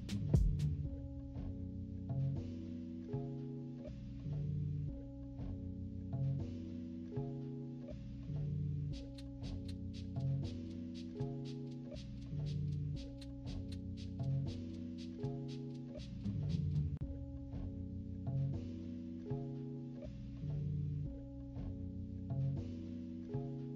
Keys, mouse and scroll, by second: 0.2 click, 0.4 click, 0.5 click, 1.3 click, 1.5 click, 2.0 click, 2.4 click, 3.1 -, 3.4 =, 3.5 scroll down 2, 3.9 click, 4.6 click, 5.4 click, 5.8 click, 6.6 click, 7.4 click, 8.5 click, 9.1 click, 10.4 -, 10.7 =, 10.9 scroll up 2, 11.5 click, 12.2 ctrl+z, 12.5 ctrl+z, 12.8 click, 13.5 click, 14.0 z, 15.0 click, 16.3 click, 17.4 click, 18.5 z, 19.0 click, 19.2 click, 19.4 click, 19.6 click, 20.2 click, 20.7 -, 21.0 scroll up 2, 21.1 =, 21.5 click, 22.0 click, 23.1 click.